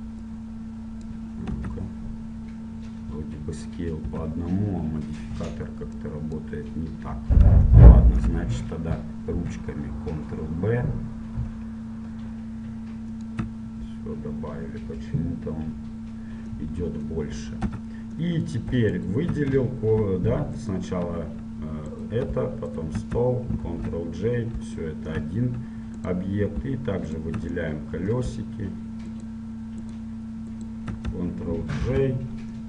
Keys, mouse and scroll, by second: 1.8 Tab, 1.8-4.2 drag, 4.2 Tab, 7.4 click, 8.0-9.6 middle drag, 9.6 ctrl+b, 16.8-18.6 middle drag, 17.8 Tab, 19.1-25.0 right drag, 23.8 ctrl+j, 25.0-26.1 middle drag, 26.1-28.2 right drag, 30.0-32.6 right drag, 32.0 ctrl+j.